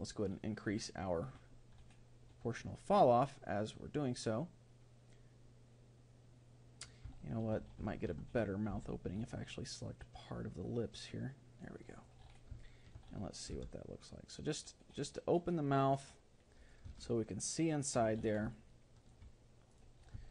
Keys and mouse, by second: 7.2-9.8 middle drag, 8.7 c, 12.7-14.4 middle drag, 13.6 r, 17.0-19.7 middle drag, 19.7 click, 20.0-20.3 right drag.